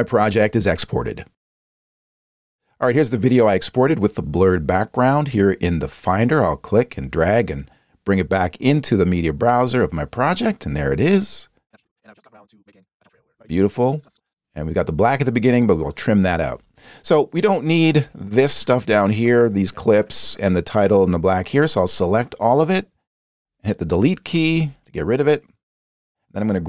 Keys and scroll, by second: 24.4 BackSpace.